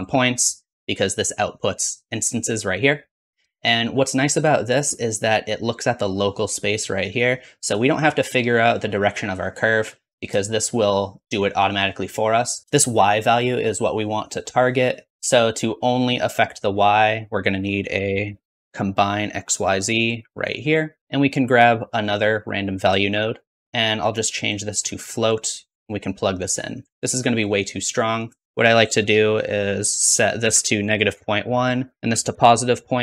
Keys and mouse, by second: 10.9-14.8 shift+drag, 15.1-16.5 drag, 21.0-22.3 middle drag, 22.4-23.6 drag, 23.0 shift+d, 24.0-28.1 drag.